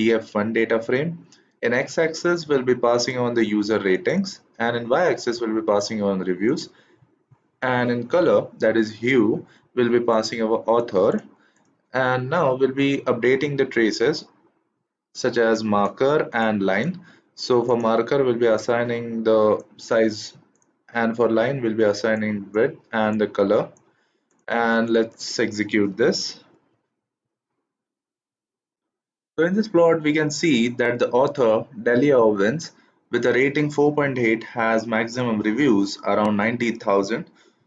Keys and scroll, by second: 25.9 shift+Return.